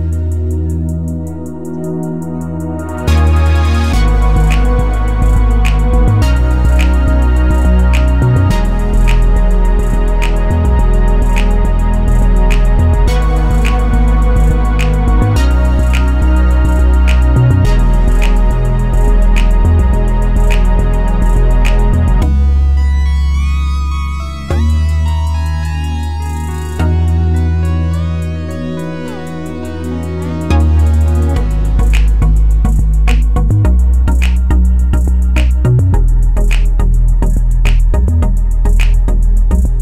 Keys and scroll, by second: 4.0 1, 4.2 Return, 6.5 2, 6.7 Return, 17.6-18.5 typing, 21.1 7, 22.3 Return, 24.4-25.3 typing.